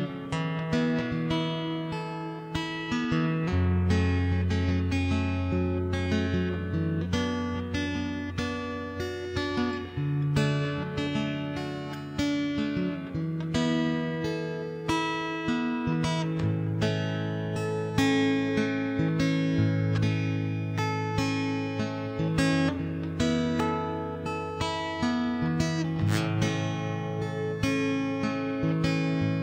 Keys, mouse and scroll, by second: 0.0 shift+space, 0.4 ctrl+KP_1, 0.8 ctrl+Tab, 0.9 v, 1.2 Escape, 1.3 ctrl+Tab, 1.5 ctrl+Tab, 1.7 Escape, 1.8 click, 2.0 right click, 2.1 Tab, 2.9 a, 3.1 a, 3.6 c, 5.0 middle click, 5.6 click, 7.2 middle click, 8.0 click, 8.8 middle click, 9.4 Tab, 9.6 shift+space, 9.8 click, 11.0 shift+space, 11.3 ctrl+s, 11.4 right click, 11.6 Escape, 11.6 shift+d, 12.1 m, 12.3 middle click, 12.5 right click, 12.8 middle click, 13.2 shift+space, 13.5 click, 14.0 shift+space, 14.1 Tab, 14.4 ctrl+KP_1, 14.8 a, 14.8 c, 15.6 ctrl+l, 15.8 middle click, 16.0 ctrl+KP_3, 16.4 r, 17.2 ctrl+,, 17.3 r, 18.6 middle click, 19.2 a, 19.4 middle click, 19.6 c, 20.4 middle click, 20.8 ctrl+j, 21.0 Escape, 21.2 ctrl+i, 21.4 middle click, 21.9 middle click, 22.4 shift+s, 22.6 middle click, 22.7 click, 23.5 ., 23.6 x, 23.8 Escape, 24.1 s, 25.2 middle click, 25.7 Tab, 26.0 ctrl+s, 26.2 0, 26.5 click, 26.6 middle click, 26.6 right click, 26.7 shift+space, 26.8 middle click, 27.2 middle click, 27.4 right click, 27.6 click, 28.2 x, 28.4 click.